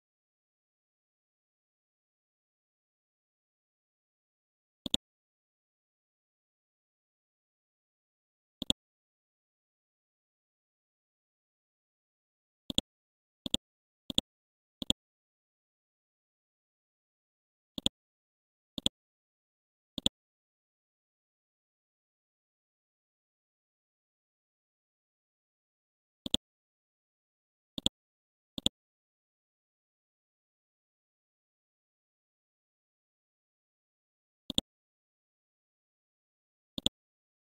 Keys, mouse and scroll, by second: 2.2 scroll down 1, 3.7-4.8 scroll up 1, 4.8 click, 6.0 scroll down 1, 6.6-6.9 scroll up 1, 8.0-8.4 scroll down 1, 8.6 ctrl+click, 9.3-10.0 scroll up 1, 10.6 scroll down 1, 11.6-12.2 scroll up 1, 12.7 ctrl+click, 13.4 click, 15.8 ctrl+z, 16.4 F12, 17.8 click, 21.0 KP_2, 21.2 KP_0, 22.0 shift+Left, 22.5 KP_3, 22.7 KP_0, 23.1 shift+Left, 23.5 KP_2, 23.7 KP_0, 23.9 Tab, 26.2 click, 28.6 ctrl+click, 29.3-30.1 scroll up 1, 30.1-30.4 scroll down 1, 31.2-31.5 scroll up 1, 32.8 scroll down 1, 33.8-34.3 scroll up 1, 34.5 ctrl+click, 36.8 click.